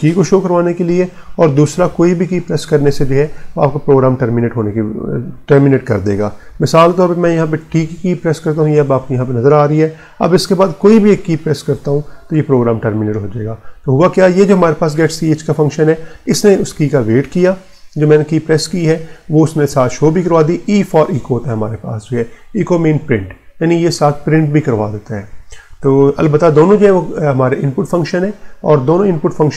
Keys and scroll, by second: 7.5 t, 11.6 g.